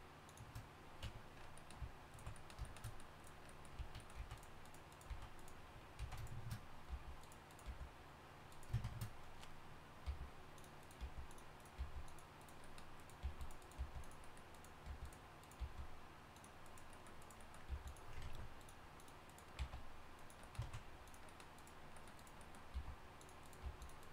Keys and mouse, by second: 1.0 Tab, 3.8-7.6 typing, 8.8 shift+Tab, 10.1 g, 11.0 g, 11.8 g, 12.3-14.5 drag, 13.2 g, 13.8 g, 14.5 right click, 15.6 g, 17.2 click, 17.5 click, 17.7 g, 18.2 ctrl+Tab, 19.6 x, 20.6 ctrl+Tab, 21.5 click, 22.7 g, 23.6 g.